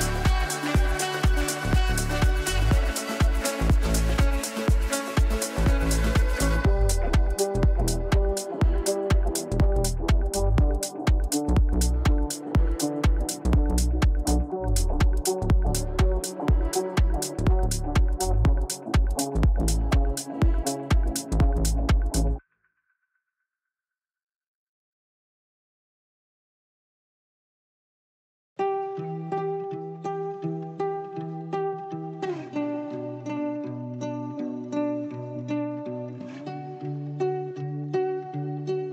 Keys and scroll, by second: 3.9 Delete, 32.5 Delete.